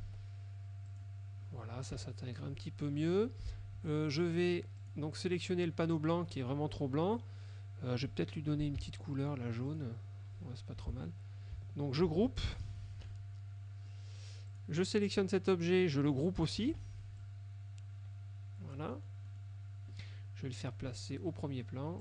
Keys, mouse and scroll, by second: 0.1 Escape, 1.0 click, 2.0 KP_Subtract, 3.0 middle click, 3.8 F1, 4.0 click, 4.9 click, 8.8 F7, 9.8 click, 10.9 F1, 12.2 ctrl+g, 13.2 KP_Subtract, 14.0 middle click, 14.6 click, 16.7 ctrl+g, 17.3-19.0 ctrl+drag, 19.0 middle click.